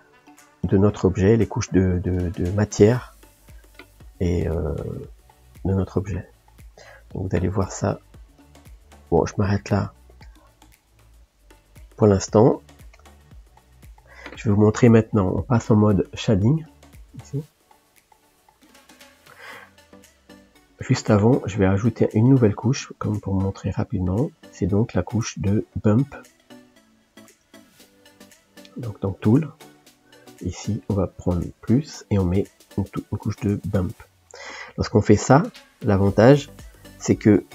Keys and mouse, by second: 5.5-9.7 drag, 9.7-19.5 middle drag, 19.8 click, 22.5-24.7 drag.